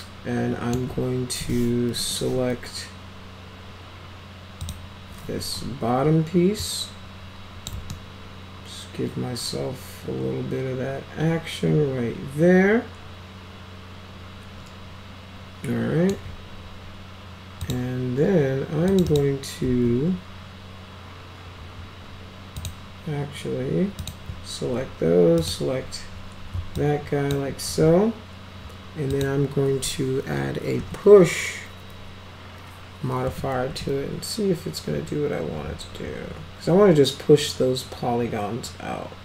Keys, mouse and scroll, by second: 2.0 1, 4.6 click, 5.4 w, 6.6-7.7 drag, 7.9-16.1 alt+middle drag, 17.6 click, 18.9 click, 19.1 click, 22.6 click, 24.0 click, 25.4 ctrl+click, 26.8-27.3 alt+drag, 29.1 click, 30.8 p, 33.3 p, 33.7 p.